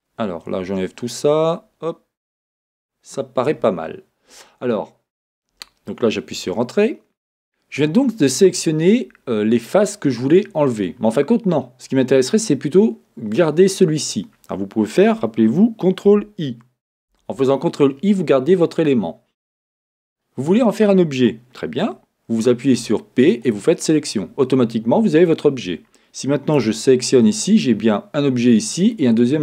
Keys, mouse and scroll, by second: 6.4 Return, 17.1 ctrl+i, 20.0 scroll down 1, 22.8 p, 26.6 Tab, 27.2 click, 28.8 click.